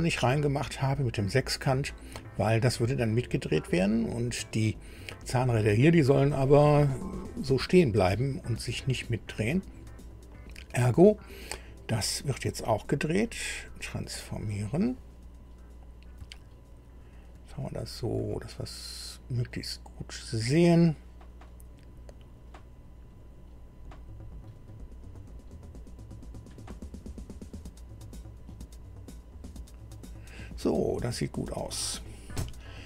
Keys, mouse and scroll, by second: 12.6 right click, 14.2 click, 15.3 scroll up 1, 16.3-17.4 shift+middle drag, 17.6 shift+scroll up 3, 18.2-20.6 shift+middle drag, 21.5-30.1 drag, 30.7-31.0 scroll down 2.